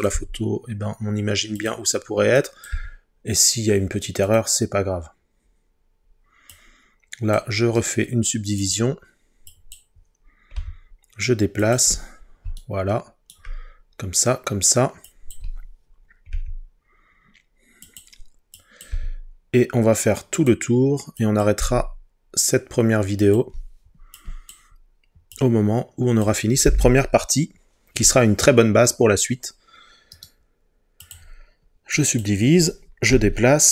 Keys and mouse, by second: 0.2 g, 1.6 click, 2.4 click, 2.7 g, 4.3-5.8 drag, 8.0 right click, 10.6 g, 11.7 click, 16.3 g, 17.9 click, 18.9 g, 20.4-21.6 drag, 21.6 g, 23.2 click, 24.2 click, 30.2-31.2 right drag, 33.1 g.